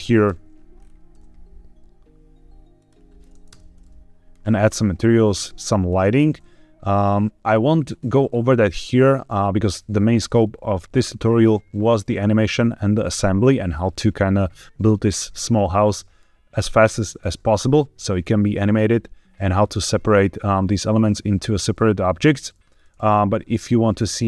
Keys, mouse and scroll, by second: 0.1 KP_1, 0.7-1.0 scroll up 2, 1.0 g, 1.1 z, 2.7 click, 3.4 KP_0, 4.5-5.1 scroll up 2, 5.6 click, 6.2 g, 6.3 z, 7.8-8.2 drag, 8.2-8.7 scroll up 1, 23.0-24.2 drag.